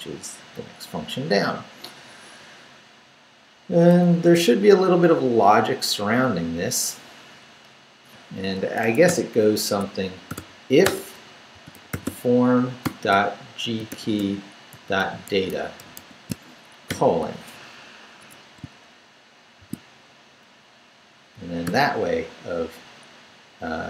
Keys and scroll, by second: 0.9 Up, 4.2 Down, 5.6 Down, 8.8 Escape, 9.1-16.9 typing, 9.7 Tab, 17.5 shift+Down, 18.2 Escape, 19.6 shift+v, 19.8 shift+Down, 20.6 Up, 21.3 shift+Up, 21.6 shift+., 23.1 Down.